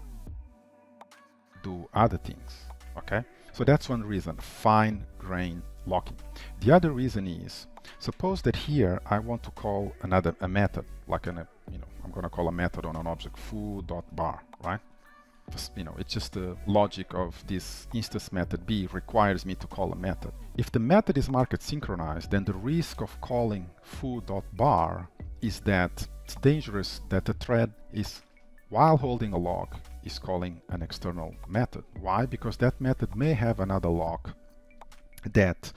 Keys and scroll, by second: 1.2 ctrl+v, 8.1 shift+Return, 20.4 ctrl+s.